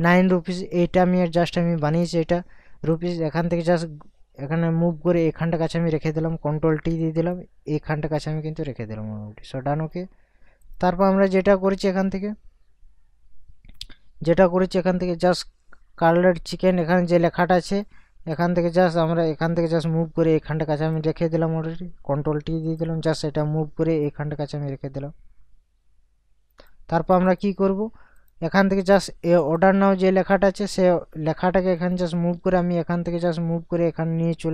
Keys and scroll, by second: 6.7 ctrl+t, 22.1 ctrl+t.